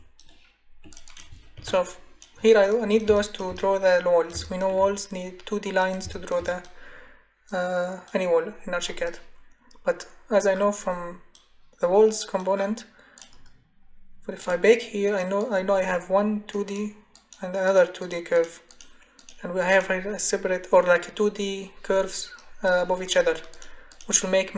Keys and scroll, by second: 1.6 Delete.